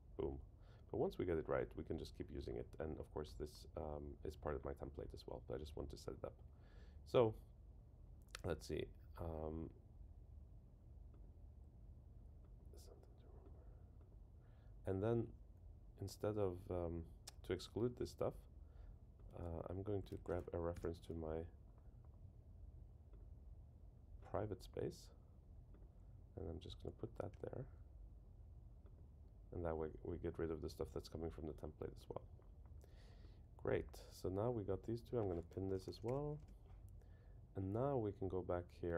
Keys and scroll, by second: 20.1 super+c, 20.7 super+[, 27.3 super+v, 35.7 super+k, 36.4 Return.